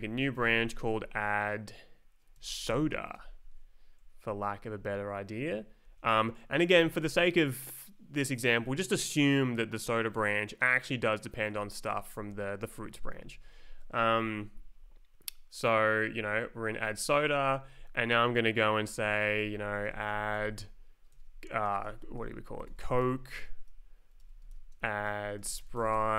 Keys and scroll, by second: 0.0-1.1 typing, 2.1-3.1 typing, 4.0 Right, 4.6 Left, 5.5 Right, 5.8 Left, 6.0 Right, 11.7 Down, 12.1 Up, 13.1 Left, 16.8 Right, 19.2-20.4 typing, 21.4-26.1 typing.